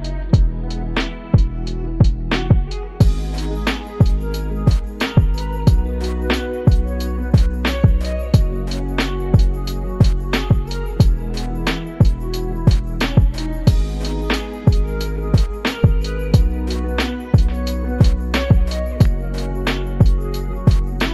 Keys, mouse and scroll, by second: 2.3 click, 3.2 g, 6.2-6.8 middle drag, 7.6-8.0 shift+middle drag, 9.1 click, 9.7 click, 13.0 shift+a, 18.6 r.